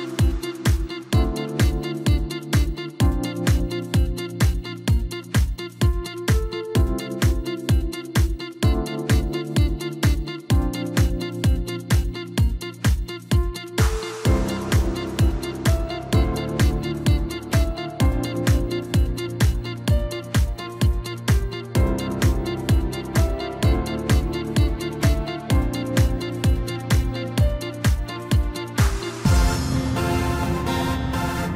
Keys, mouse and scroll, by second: 0.9 KP_3, 1.6-2.2 scroll down 1, 2.2 e, 7.5-9.8 middle drag, 9.8 KP_7, 11.2 s, 13.0 s, 16.3-18.4 middle drag, 18.4 KP_3, 19.6 e, 23.4-24.9 middle drag, 24.9 KP_7, 25.7 scroll up 1, 26.0-26.9 scroll down 1.